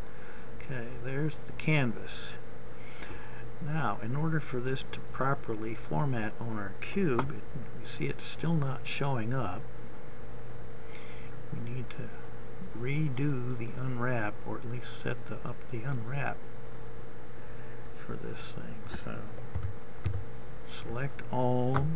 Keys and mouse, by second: 13.5 click, 19.9 a, 20.6 a.